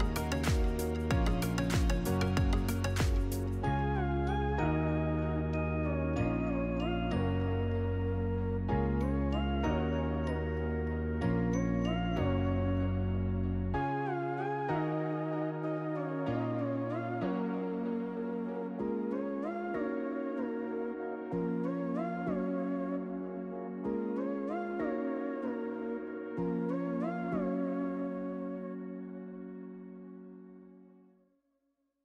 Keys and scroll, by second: 2.8 ctrl+v, 6.1 1, 7.3 Return, 9.1 8, 9.8 Return, 13.4-16.4 typing, 25.1 Delete, 28.0 c, 28.4 t, 31.9 b.